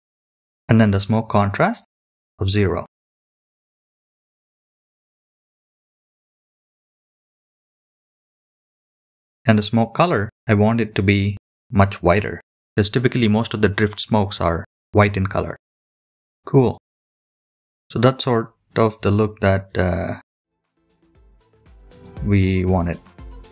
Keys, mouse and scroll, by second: 16.3 scroll up 3, 16.4 scroll down 2, 21.3 scroll up 3.